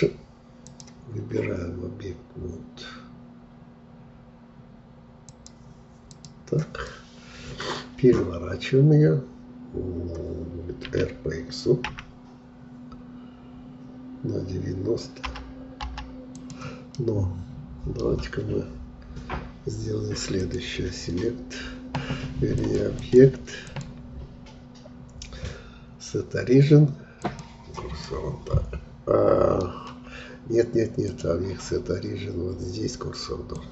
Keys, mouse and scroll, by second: 0.7-6.7 drag, 6.8-10.0 middle drag, 10.9 r, 16.9-20.0 middle drag, 20.3-28.0 drag, 28.0-31.0 middle drag, 31.0-33.7 drag.